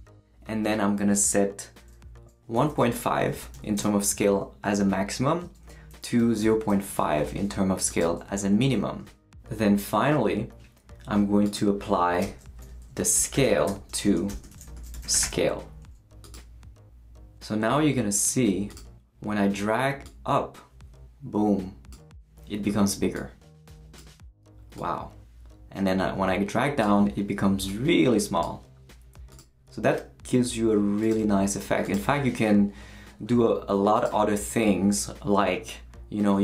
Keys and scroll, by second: 2.3-3.8 typing, 5.9-7.1 typing, 12.2 Return, 12.7-15.7 typing.